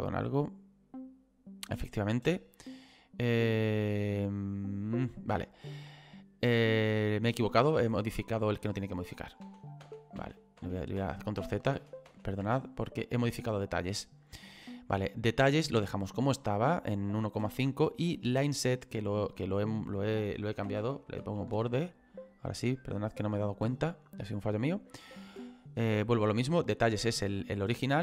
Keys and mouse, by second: 3.5 click, 7.5 click, 18.4 click, 20.8 o, 22.3 click.